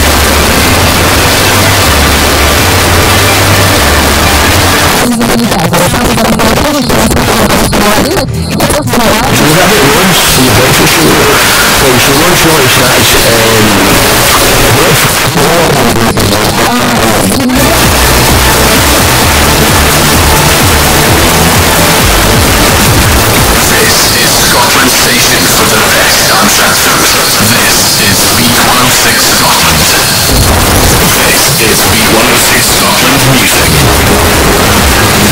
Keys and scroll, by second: 4.9 Page_Down, 15.1 Page_Down.